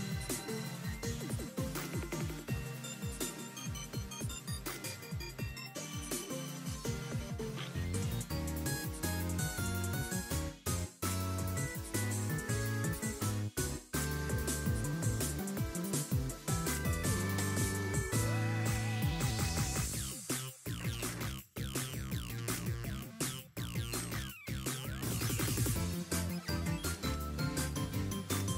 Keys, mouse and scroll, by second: 0.8 scroll up 3, 1.0 middle click, 1.7-2.2 scroll down 4, 1.9 middle click, 2.2-2.7 scroll up 2, 2.9 click, 3.6 r, 4.8 r, 9.0-9.7 scroll down 2, 9.9 click, 11.8 click, 12.5 click, 13.3 r, 22.0-22.7 scroll up 2, 22.3 shift+middle click, 24.1 r, 25.9-26.2 scroll down 5, 26.2-27.3 scroll up 3, 26.5 shift+middle click, 27.3 r, 28.4 r.